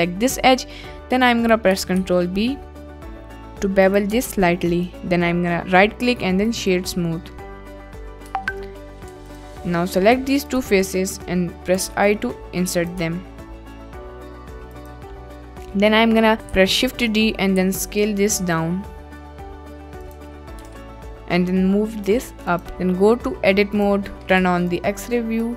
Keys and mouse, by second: 2.0 ctrl+b, 3.8 click, 4.1 Tab, 4.5 middle click, 4.7 click, 7.1 click, 8.1 click, 8.3 Tab, 9.1 3, 9.7 middle click, 10.5 shift+click, 11.3 middle click, 11.8 1, 12.8 click, 13.0 Tab, 13.4 middle click, 16.6 shift+d, 17.6 s, 20.0 drag, 20.6 g, 20.6 z, 22.5 click, 22.7 Tab, 23.8 click, 24.3 1, 24.8 click.